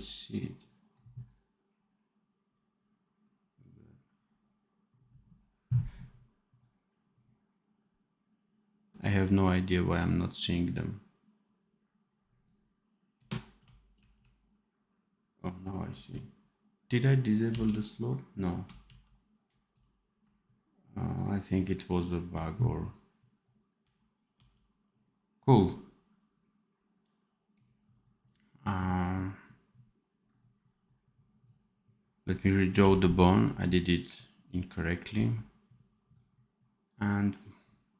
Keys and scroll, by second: 13.9 ctrl+h, 17.4 ctrl+z, 18.8 ctrl+shift+z, 22.1 r, 24.3 r, 32.7 n.